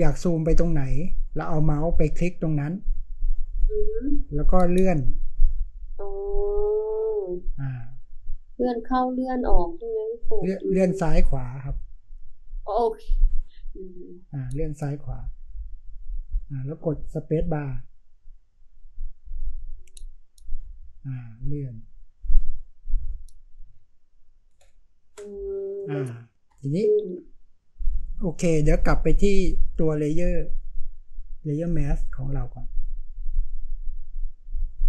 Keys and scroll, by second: 23.6 space, 25.3 v, 25.8-26.5 space.